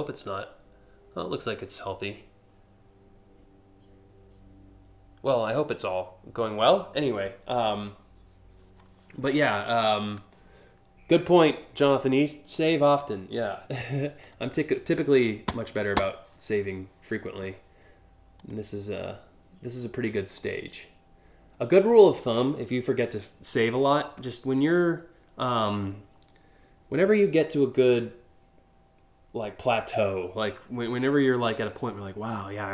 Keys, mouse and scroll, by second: 18.1 click.